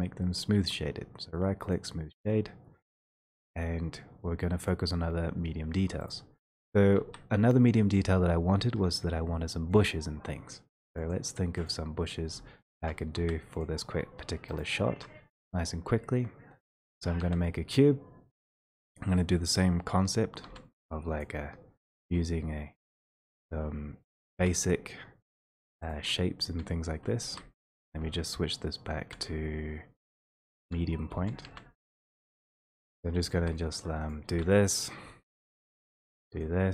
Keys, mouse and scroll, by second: 0.6 Escape, 1.8 click, 4.8 click, 7.1 Escape, 9.9 click, 11.1 click, 11.7 click, 13.2 1, 13.8 click, 16.8 click, 17.5 r, 19.2 e, 23.3 w, 27.3 Escape, 27.3 click, 27.9-31.8 typing, 30.1-31.5 drag, 34.7 click.